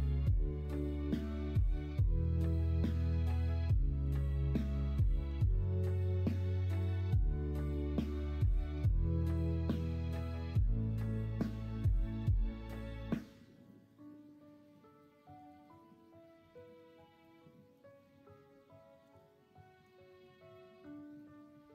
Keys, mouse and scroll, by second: 1.3 l, 2.8 s, 4.3 f, 5.4 ctrl+z, 6.1 s, 7.3 ctrl+z, 8.0 ., 9.5 s, 10.4 g, 12.3 s.